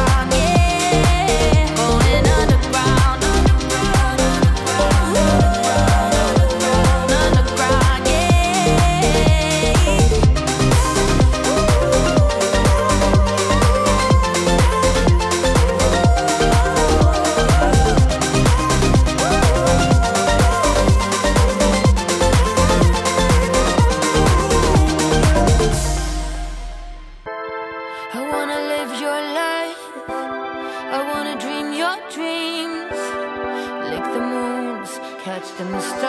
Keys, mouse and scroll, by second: 7.2 right click, 8.0 right click, 8.3-11.3 drag, 11.3 Page_Up, 12.9-18.5 drag, 15.0 Delete, 23.0 space, 25.8 click, 26.5 space, 29.9 space, 30.4-36.0 drag.